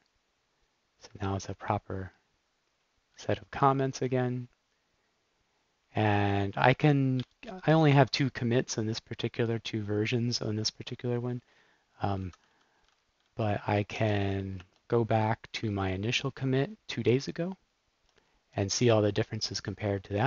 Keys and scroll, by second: 1.1 BackSpace, 3.1 super+s, 7.2 shift+super+p, 12.1-13.6 typing, 13.8 Up, 14.5 Return, 15.4 Down, 17.9 typing, 18.0 Return.